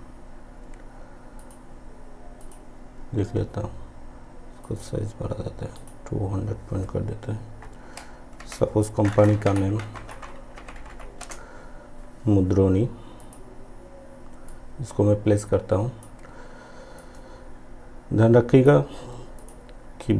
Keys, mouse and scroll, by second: 4.8 click, 8.5 shift+m, 11.3 space, 13.3-19.4 drag.